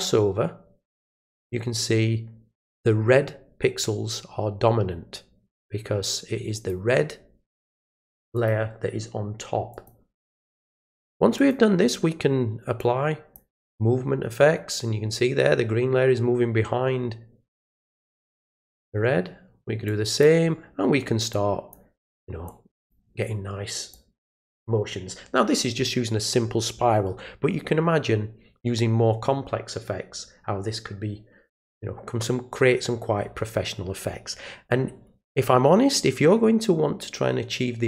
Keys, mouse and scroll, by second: 6.5 click, 8.3 click, 9.7 click, 11.3 click, 12.8 click, 18.7 click, 19.8 click, 21.3 click, 22.4-22.9 drag, 23.9 click.